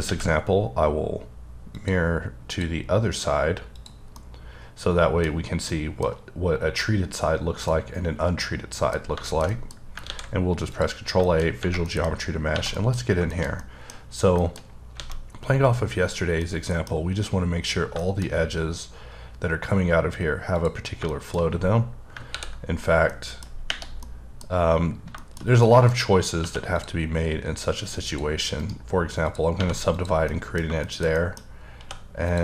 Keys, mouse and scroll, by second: 0.0 alt+x, 1.7 click, 2.5 click, 3.7 click, 4.1 middle click, 5.3 scroll up 3, 5.7 middle click, 7.6 middle click, 9.0 scroll down 2, 9.2 shift+middle click, 9.5 double middle click, 9.8 scroll up 2, 10.1 ctrl+a, 10.7 click, 11.2 middle click, 11.9 middle click, 12.1-12.5 scroll up 2, 12.5 1, 12.7 middle click, 13.3 shift+middle click, 14.0-14.9 scroll up 3, 14.4 shift+middle click, 15.0 alt+a, 15.3-15.8 scroll up 1, 15.8-16.2 scroll down 2, 16.4 middle click, 18.2 scroll up 2, 20.5 click, 21.1 shift+middle click, 21.7-22.1 scroll down 4, 22.3 ctrl+r, 23.1 middle click, 24.0 middle click, 25.2 double middle click, 25.6 middle click, 26.4 2, 26.7 click, 28.0 click, 28.5 right click, 29.2 click, 29.6 1, 29.9 click, 30.3 middle click, 30.8 shift+middle click, 31.8 2, 32.2 click.